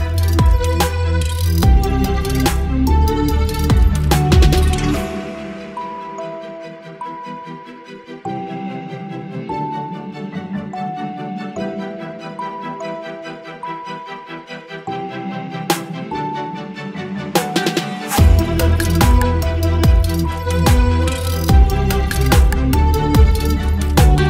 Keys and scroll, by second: 0.8 Delete, 4.5 Delete, 5.6 Delete, 8.4 Delete, 10.0 ctrl+BackSpace, 11.9 Delete, 12.3 space, 19.4 Delete, 23.1 ctrl+BackSpace.